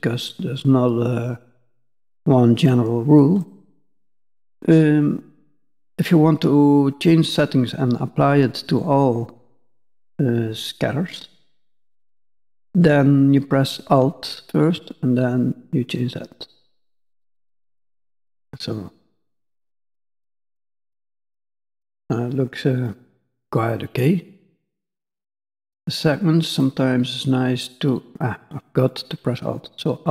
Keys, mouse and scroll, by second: 14.3 alt+click, 20.0 middle click, 22.8 middle click, 22.8 scroll up 1, 24.4-25.2 scroll down 3, 26.6 click, 28.4 click.